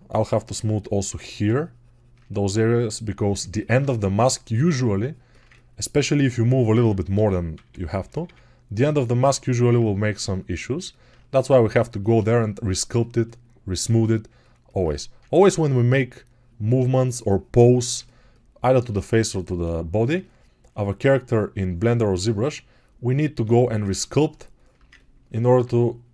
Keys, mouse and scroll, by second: 7.4-8.1 typing, 14.7 1.